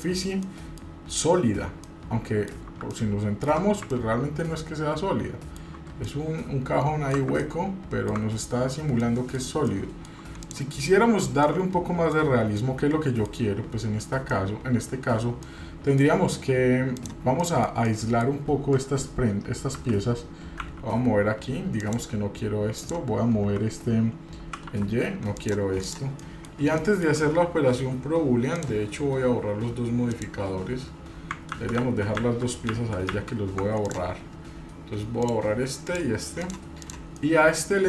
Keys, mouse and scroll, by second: 0.4-0.8 middle drag, 1.8-2.5 middle drag, 2.9-3.4 ctrl+alt+middle drag, 3.9-5.6 ctrl+middle drag, 6.1-7.1 shift+middle drag, 7.4 ctrl+middle click, 8.3-9.0 scroll down 4, 9.0-9.4 middle drag, 9.7-10.3 shift+middle drag, 10.4 click, 11.4-12.1 middle drag, 12.2-12.5 scroll down 2, 12.5-13.3 middle drag, 14.3 middle click, 15.4-16.1 middle drag, 16.9 click, 17.5-18.2 shift+middle drag, 19.7 g, 22.8 click, 24.4 g, 25.8 click, 26.2 middle click, 26.6 shift+middle click, 28.5-29.9 drag, 30.1 drag, 31.5 ctrl+z, 31.8 ctrl+z, 32.5 ctrl+z, 32.7 ctrl+z, 33.1 ctrl+z, 33.8 click, 35.2 click, 35.9 click, 36.4 drag, 36.8 drag, 37.3-37.8 middle drag.